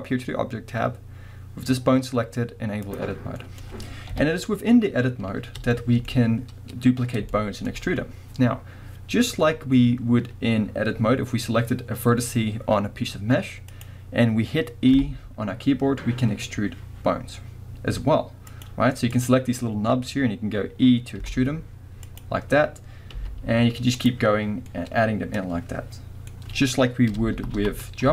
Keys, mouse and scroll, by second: 3.4-13.7 middle drag, 4.1 KP_1, 6.1-7.3 scroll up 2, 13.7 click, 14.9 e, 19.1 click, 21.2 e, 22.2 click, 22.6-23.1 scroll down 1, 23.1 e, 24.1 click, 24.7-28.1 middle drag, 27.4 ctrl+z.